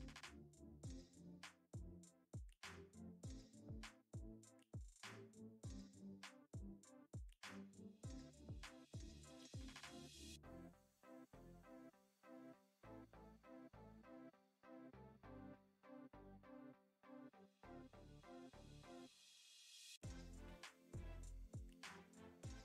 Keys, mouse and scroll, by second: 0.1 KP_Divide, 0.3 middle click, 0.7 middle click, 1.1 middle click, 1.3 shift+click, 2.1 middle click, 2.4 ctrl+e, 2.9 middle click, 3.3 middle click, 3.6 middle click, 4.0 Tab, 4.2 click, 4.6 middle click, 5.2 Tab, 5.6 a, 5.8 s, 6.4 g, 7.1 middle click, 7.4 Tab, 8.2 KP_Divide, 8.6 drag, 8.7 middle drag, 8.8 scroll up 1, 9.0 middle click, 9.2 Tab, 9.3 a, 9.6 s, 10.7 g, 11.3 click, 11.8 Tab, 12.6 Tab, 13.2 s, 13.6 g, 14.2 Tab, 14.8 drag, 15.1 click, 15.3 shift+click, 15.5 shift+click, 16.8 middle click, 17.0 middle click, 17.2 middle click, 17.6 ctrl+e, 18.2 middle click, 18.4 middle click, 18.8 a, 19.0 middle click, 19.9 s, 20.8 g, 22.3 Tab, 22.4 click.